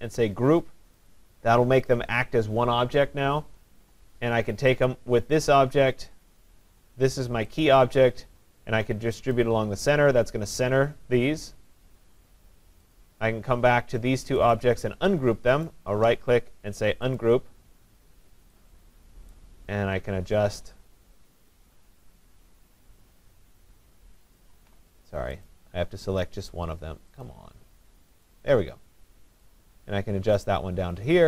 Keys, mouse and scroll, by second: 1.1 click, 4.9 shift+click, 7.7 click, 9.4 click, 11.7 click, 14.5 click, 15.7 right click, 17.2 click, 19.3 click, 24.4 click, 24.6 ctrl+z, 25.5 click, 26.2 click, 27.2 click, 28.3 click.